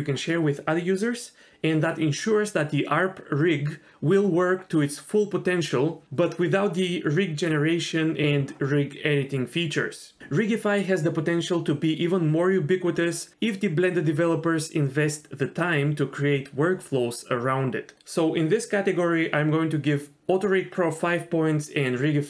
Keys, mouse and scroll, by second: 6.3-7.9 drag, 9.0 middle click, 10.5 f, 11.9 click, 12.5 click, 12.7 click, 12.9 click, 13.2 click, 13.4 click, 13.9 click, 14.1 click, 14.5 click, 14.6 click, 15.8 middle click, 16.3 click, 17.2 click, 17.3 click, 17.7 click, 17.9 click, 18.1 click, 18.3 click, 18.8 middle click, 19.9 click, 20.5 click, 20.6 click, 21.2 click.